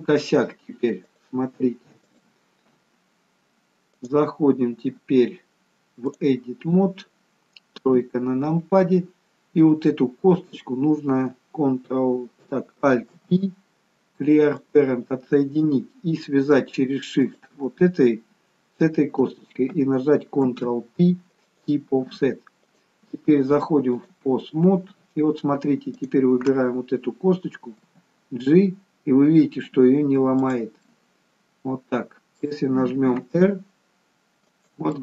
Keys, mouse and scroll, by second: 1.1 click, 4.0 click, 7.8 KP_3, 10.3 click, 13.1 alt+p, 17.2 shift+click, 20.5 ctrl+p, 22.6 click, 26.0 click, 27.7 g, 30.8 middle click, 33.1 r.